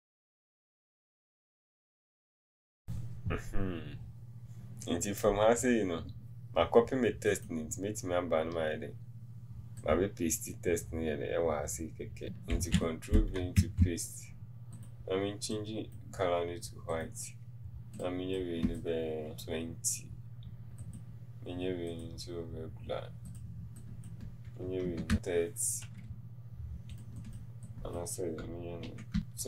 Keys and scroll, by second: 19.3 Return, 19.3 KP_2, 19.3 KP_0, 25.0 KP_3, 29.0 KP_2, 29.2 Return, 29.2 KP_8.